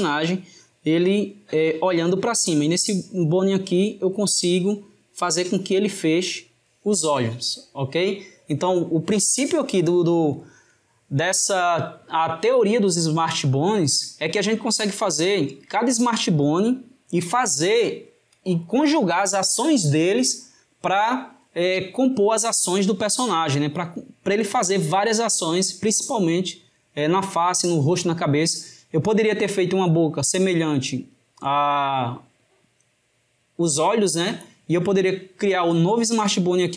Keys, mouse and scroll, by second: 1.7 drag, 2.6 drag, 14.8 drag, 21.6 drag, 36.6 drag.